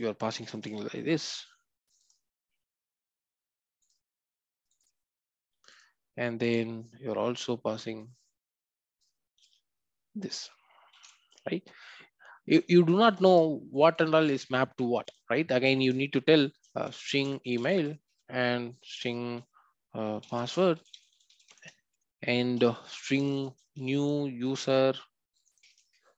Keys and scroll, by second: 9.4 ctrl+c.